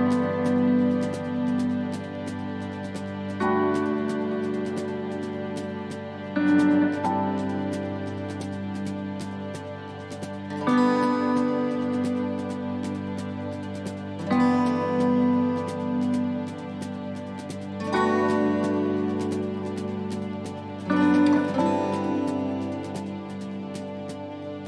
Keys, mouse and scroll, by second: 0.9 middle click, 1.3-2.1 scroll down 5, 2.1 middle click, 2.5-3.1 scroll up 5, 5.1 scroll down 1, 6.0 scroll down 1, 7.2 click, 7.2 scroll up 1, 8.1 click, 13.4 click, 14.4 right click, 15.0 alt+shift+right click, 16.0 alt+shift+right click, 16.1 middle click, 17.2 alt+shift+right click, 19.5 click, 19.9 middle click, 21.6 right click, 22.1 alt+shift+right click, 22.9 right click, 23.7 alt+shift+right click, 23.8 middle click.